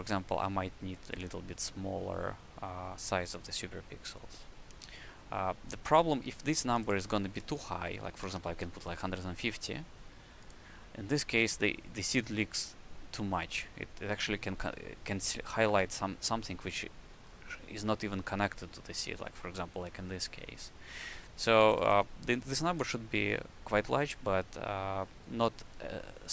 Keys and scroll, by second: 8.2 KP_5, 9.6 KP_0, 15.7 w, 16.5 space.